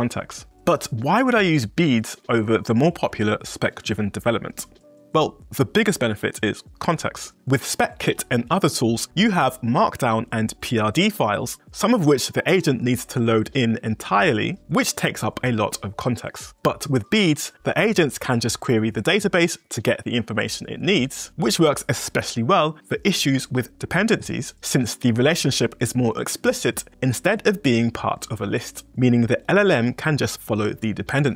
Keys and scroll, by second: 9.1 j.